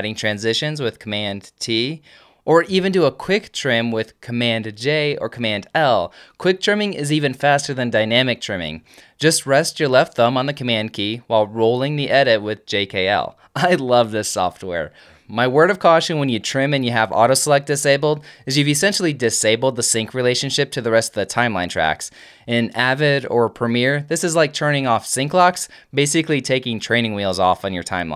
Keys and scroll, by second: 0.5 Up, 0.9 Down, 1.6 super+Down, 1.9 super+t, 3.1 Down, 5.1 super+l, 5.7 super+k, 6.2 super+j, 7.1 super+k, 7.9 super+Down, 8.9 super+Down, 9.8 super+j, 10.5 super+k, 11.4 super+Down, 12.2 super+l, 12.9 super+k, 13.7 super+Down.